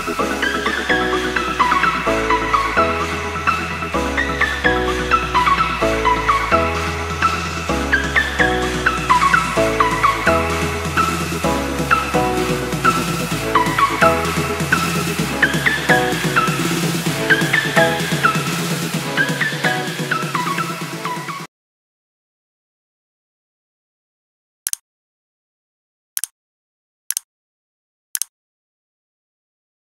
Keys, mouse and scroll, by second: 0.8 click, 4.7 ctrl+v, 5.9 BackSpace, 13.0 click, 20.3 right click.